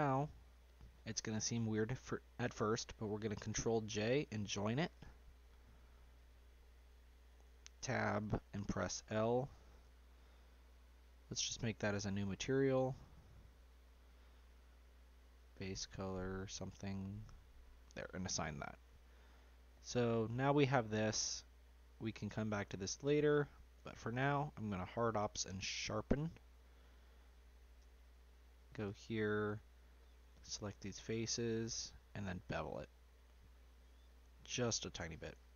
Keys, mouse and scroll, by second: 0.0 shift+click, 3.8 ctrl+j, 4.3-5.1 scroll down 1, 5.1-7.6 shift+middle drag, 7.6 Tab, 8.1 click, 8.9 l, 11.4-14.5 drag, 17.5-18.7 drag, 18.7 Tab, 19.4-21.8 middle drag, 21.8-22.3 scroll up 2, 22.3-23.7 middle drag, 23.7 q, 26.6-27.8 middle drag, 27.8 Tab, 28.5 click, 30.3 shift+click, 31.1 ctrl+click, 32.7 ctrl+b.